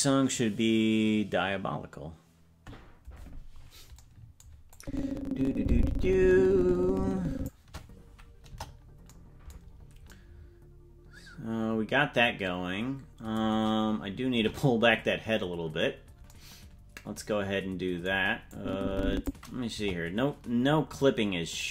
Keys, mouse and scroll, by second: 4.7-7.5 drag, 8.5 KP_0, 9.7-10.4 scroll down 4, 14.3 KP_0, 15.8-16.3 scroll down 2, 18.5 click, 19.7 KP_0, 21.6-21.7 drag.